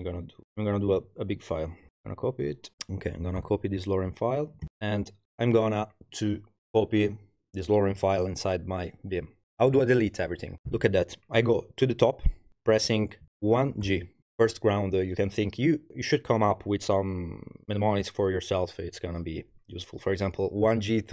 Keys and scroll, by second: 0.2-0.9 typing, 2.7 super+c, 3.4 super+h, 13.3 1, 13.9 shift+g.